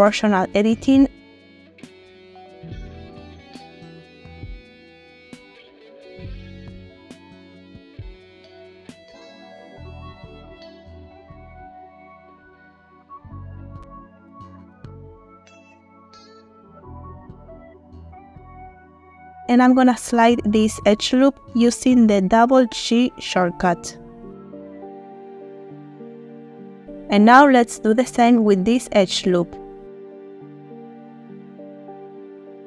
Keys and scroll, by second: 1.4 g, 2.1 Page_Down, 3.8 Page_Down, 4.2 z, 10.8 alt+g, 10.9 alt+z, 14.9 g, 15.1 z, 17.7 alt+g, 17.8 alt+z, 19.5 g, 23.5 Tab, 23.9 space, 26.5 Tab, 28.7 alt+g.